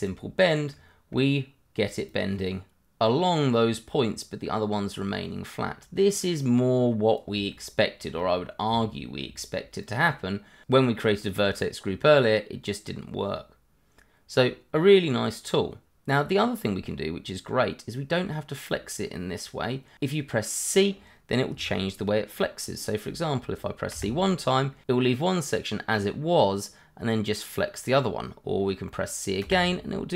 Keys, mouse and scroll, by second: 0.1 click, 0.7 middle click, 2.1 click, 3.5 click, 7.5 shift+middle click, 8.3-8.8 scroll down 1, 8.8 shift+middle click, 9.8 click, 12.6 click, 18.0 click, 23.9 click, 27.5 click, 29.7 click.